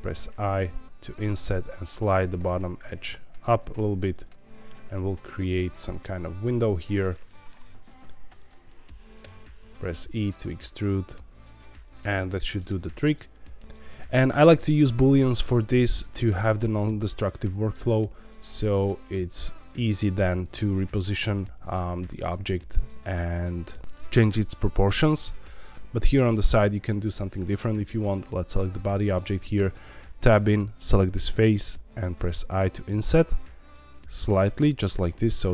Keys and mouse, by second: 1.0 click, 1.3 2, 1.7 click, 2.2 g, 2.3 g, 4.1 click, 4.4 1, 4.6 click, 4.9 middle click, 5.4 g, 5.5 g, 6.9 click, 7.2 middle click, 7.6 3, 8.6 middle click, 9.2 e, 11.8 click, 12.0 middle click, 12.6 Tab, 12.9 middle click, 14.7 click, 29.5 Tab, 30.3 click, 31.4 i, 34.5 click, 34.8 middle click.